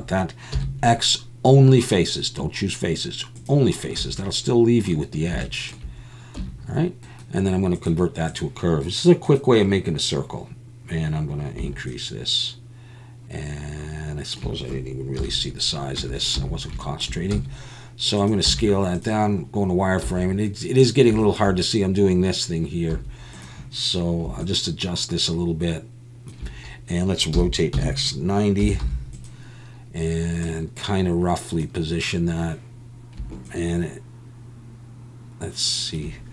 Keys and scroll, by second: 0.5 x, 4.0 a, 6.4 Tab, 15.2 KP_1, 16.0 Tab, 16.4 a, 17.3 s, 18.5 z, 20.0 s, 22.9 s, 27.3 r, 27.7 x, 28.6 9, 28.8 0.